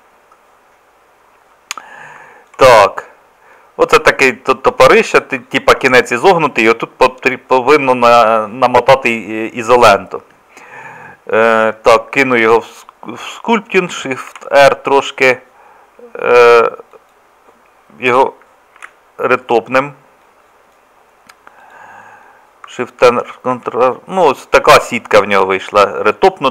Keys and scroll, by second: 21.7 ctrl+r, 23.6 Tab.